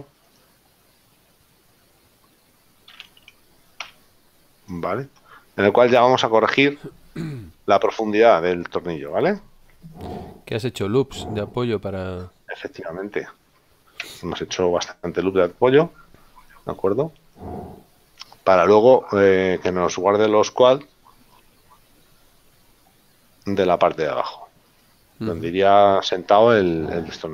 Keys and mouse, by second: 2.2 click, 3.9 KP_Decimal, 7.9 shift+middle click, 16.0 middle click, 25.0 middle click.